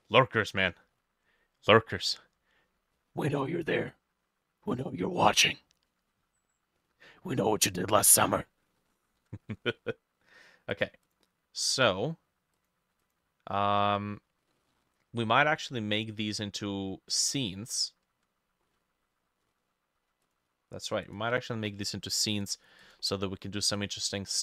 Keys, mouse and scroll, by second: 0.0 middle click, 8.8 middle click, 9.3 ctrl+s, 11.1 double click, 13.1 double click, 14.2 scroll down 1, 14.6 middle click, 15.5 middle click, 22.9 double click.